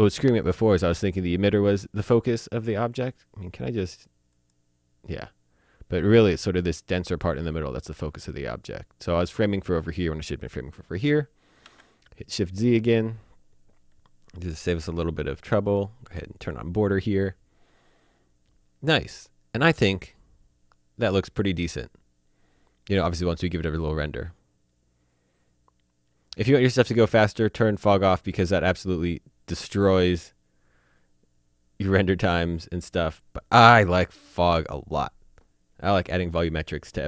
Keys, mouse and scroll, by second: 4.3 click, 10.9 shift+Num_Lock, 11.6 z, 14.8 click, 16.4 click, 27.7 click, 34.4 click.